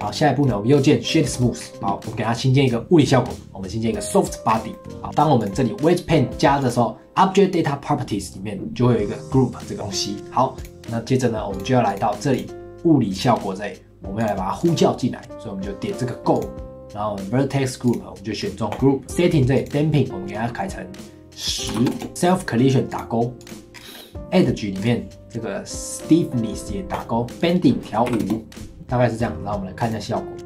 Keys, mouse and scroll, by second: 0.0 click, 0.4 right click, 1.6-2.0 scroll up 4, 2.0 click, 4.0 click, 4.4 scroll down 4, 4.7 middle click, 5.0-6.6 drag, 10.6 click, 11.5-12.4 drag, 13.1 click, 14.2-22.1 drag, 22.9 click, 23.4 click, 23.7-24.1 scroll down 4, 24.1 click, 24.4-25.3 scroll down 5, 26.9 click, 27.4-28.7 drag, 28.7-29.8 scroll up 5, 29.8-30.4 drag.